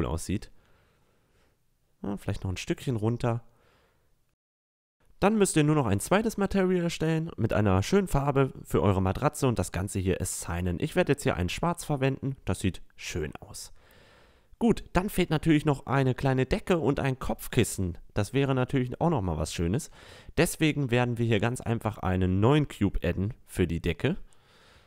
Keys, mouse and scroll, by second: 0.7 click, 1.6 a, 1.8 middle click, 3.1 ctrl+r, 4.9 middle click, 5.1 middle click, 5.8 z, 6.2 z, 6.7 click, 7.1 click, 8.1 Tab, 8.3 Tab, 8.5 Tab, 8.8 middle click, 9.1 click, 9.5 click, 10.3 click, 10.8 Tab, 10.9 Tab, 10.9 a, 12.9-13.3 middle drag, 14.2 Tab, 15.4 a, 23.8 middle click, 24.4 s.